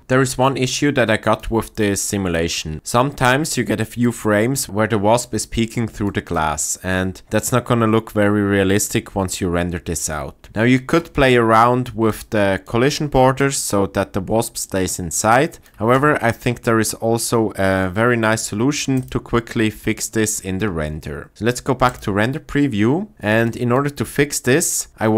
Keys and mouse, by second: 0.1 ctrl+middle click, 0.4 ctrl+click, 5.9-6.2 shift+middle drag, 7.4 click, 10.4-12.1 shift+middle drag, 12.1 click, 12.8 middle click, 19.0 click, 23.1-24.9 shift+middle drag.